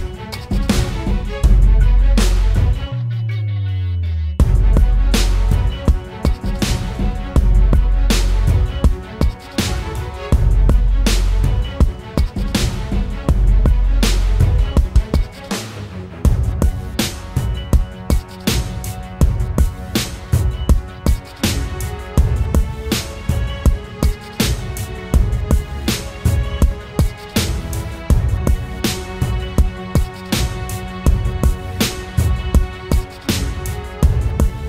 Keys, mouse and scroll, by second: 12.4-13.1 scroll down 1.